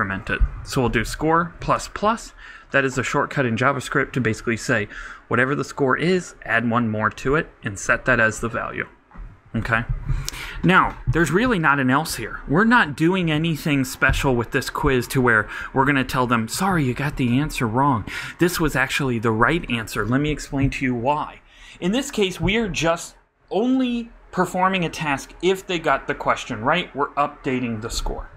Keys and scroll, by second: 1.0-2.0 typing.